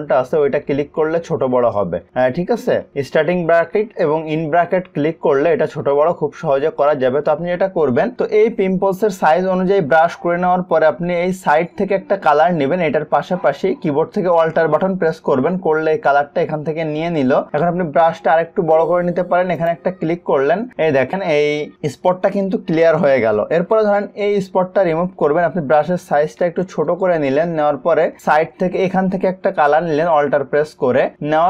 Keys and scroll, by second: 0.8 ], 3.9 [, 6.0 ].